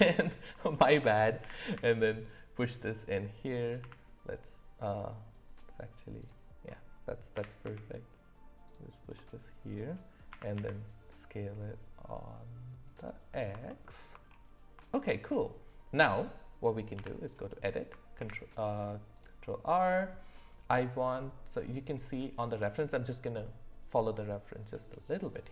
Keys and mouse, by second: 0.7 shift+middle click, 1.4 g, 3.8 s, 7.3 g, 9.1 middle click, 10.3 s, 13.7 alt+middle click, 14.9 shift+middle click, 16.9 Tab, 18.1 ctrl+r.